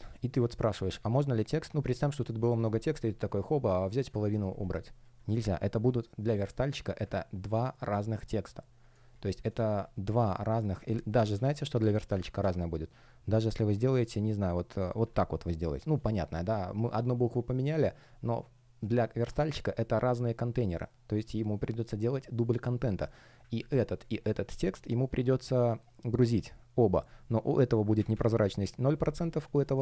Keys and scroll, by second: 10.7 space, 11.2 super+я.